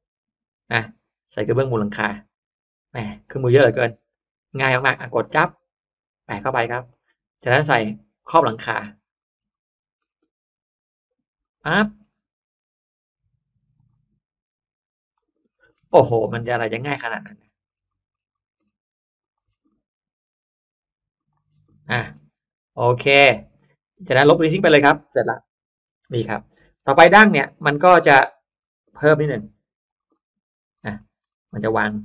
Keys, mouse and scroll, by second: 4.1 click, 4.9 click, 5.3 middle click, 5.9 click, 6.3-6.7 scroll down 1, 6.8 middle click, 7.7 click, 8.6 click, 9.0-10.2 scroll down 2, 9.1 middle click, 11.3 click, 11.6 middle click, 12.1-12.7 scroll up 1, 13.7 click, 15.0 click, 15.4-16.2 scroll down 1, 16.2 scroll up 1, 16.3 middle click, 16.3-16.9 scroll down 2, 16.9 middle click, 17.3-18.8 scroll up 2, 19.1 click, 19.3 scroll up 1, 19.5-20.1 scroll down 2, 19.6 middle click, 21.1 click, 21.5 scroll down 1, 21.6 middle click, 21.7-22.5 scroll up 2, 22.2 space, 22.7 click, 22.9 middle click, 23.1-23.5 scroll up 1, 23.5 middle click, 24.1 scroll up 1, 24.3 click, 25.6 Delete, 26.0 middle click, 26.6-29.5 scroll up 5, 27.1 middle click, 28.1 middle click, 28.9 click, 29.7 shift+click, 29.9 shift+scroll up 1, 30.0 shift+middle click, 30.1-30.7 scroll down 1, 30.7 scroll up 1, 30.7 middle click, 31.1 middle click, 31.9-32.0 scroll up 2.